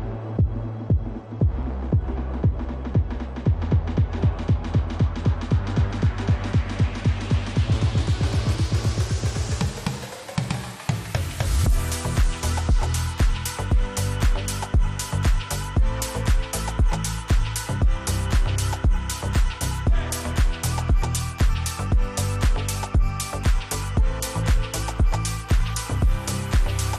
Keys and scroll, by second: 4.9 ctrl+r, 9.1 ctrl+r, 10.2 F3, 17.7 F2, 19.0 Escape, 23.8 5, 24.0 Return.